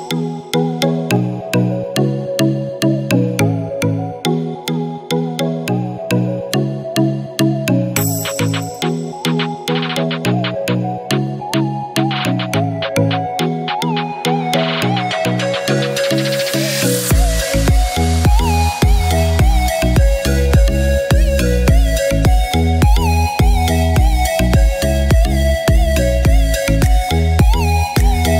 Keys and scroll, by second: 2.0 4, 6.5 3, 16.3 space, 25.1 space, 27.7 space.